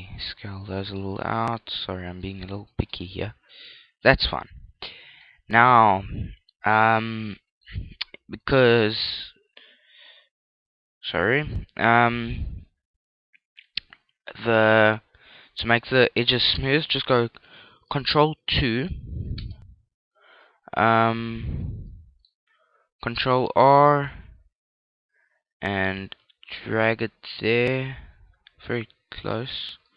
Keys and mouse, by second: 0.2 middle click, 1.3 s, 2.7 s, 3.3 click, 3.6 Tab, 3.8-6.7 middle drag, 18.8 ctrl+2, 19.4-23.8 middle drag, 19.8 Tab, 23.8 ctrl+r, 24.0-25.2 middle drag, 29.6 click.